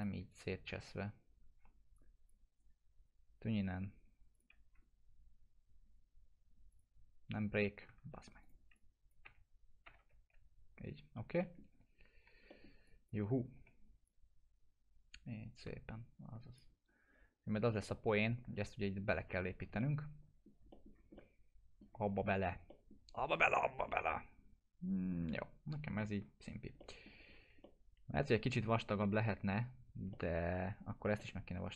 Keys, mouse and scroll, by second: 0.3 click, 0.8 F3, 1.9-2.8 click, 2.5 right click, 4.3 click, 6.7 click, 7.9 ctrl+z, 8.4-9.3 click, 9.2 BackSpace, 10.2 Delete, 11.0 scroll down 1, 11.4 middle click, 11.6 scroll down 1, 11.7 F3, 12.5 middle click, 12.8 click, 13.3 scroll up 1, 13.5 w, 14.0-16.8 drag, 16.8 scroll up 1, 17.9-18.8 alt+middle drag, 19.6 scroll down 2, 19.8-21.0 alt+middle click, 20.9 scroll down 2, 21.1-22.1 alt+middle click, 22.0-22.7 scroll up 2, 22.7 middle click, 23.0 scroll down 2, 23.8-25.1 alt+middle drag, 25.1 scroll down 1, 26.0 alt+middle click, 26.0 alt+middle click, 26.4 scroll down 1, 26.8 alt+middle click, 27.3 scroll up 1, 27.6-28.2 alt+middle drag, 30.1-30.7 alt+middle click, 31.1-31.7 alt+middle drag.